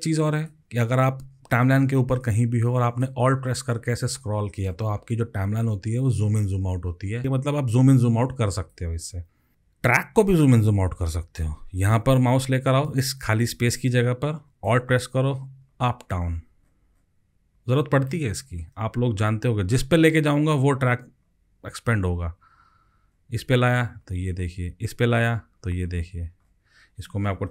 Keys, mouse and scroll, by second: 3.9-4.7 alt+scroll down 9, 4.7 alt+scroll down 6, 5.0-6.1 alt+scroll up 17, 7.2 alt+scroll up 27, 15.2-16.3 alt+scroll up 27, 16.3-17.6 alt+scroll down 20, 18.8 alt+scroll up 4, 20.3 alt+scroll down 4, 20.8-21.3 alt+scroll up 8, 21.6-23.1 alt+scroll down 5, 23.1-23.9 alt+scroll down 6, 23.9-25.2 alt+scroll up 11, 25.2-26.4 alt+scroll up 17, 26.4-26.9 alt+scroll down 4.